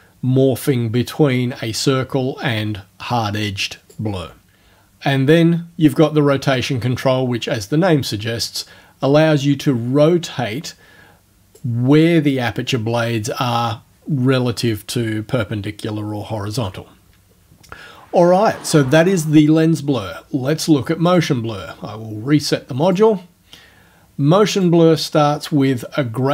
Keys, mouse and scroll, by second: 6.6-11.8 drag, 21.1 click, 22.9 click, 24.6 click.